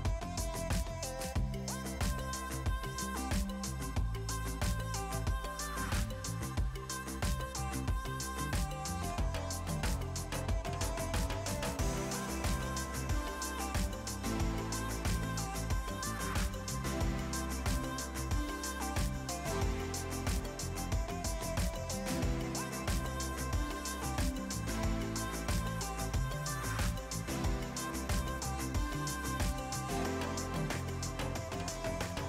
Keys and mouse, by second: 1.4 click, 2.0 click, 3.5 Delete, 3.8 click, 4.0 Delete, 4.2 click, 5.3 click, 5.5 Delete, 6.4 click, 6.5 right click, 6.8 click, 7.0 ctrl+shift+x, 7.2 click, 7.6 shift+click, 8.8 click, 9.1 s, 9.3 click, 11.8 click, 13.8 KP_3, 13.9 Return, 14.2 KP_2, 14.3 Return, 14.7 KP_3, 14.9 Return, 15.3 click, 17.5 click, 20.1 click, 22.8 KP_2, 22.9 Return, 23.3 click, 27.4 ctrl+1, 27.9 click, 30.2 a, 30.5 alt+y, 30.7 click.